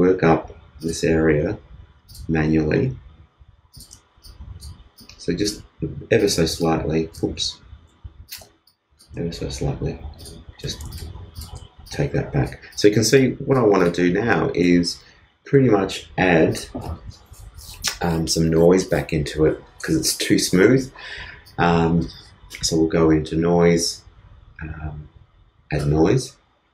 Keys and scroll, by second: 4.8 shift+space, 7.3 shift+super+z, 8.2 super+z, 8.3 super+space, 9.1 shift+space, 10.6 shift+space.